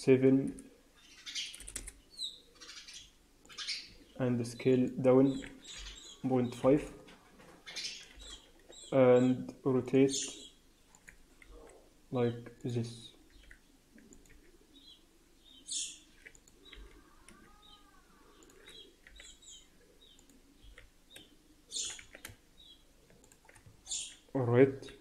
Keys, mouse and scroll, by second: 2.9 s, 3.8 s, 5.2 s, 7.3-8.1 scroll up 2, 8.1 r, 10.0 s, 11.4 g, 13.2 r, 14.2 s, 16.6 g, 19.0 r, 20.5 g, 21.9 s, 23.6 Tab, 23.8 scroll down 5, 24.6 KP_3.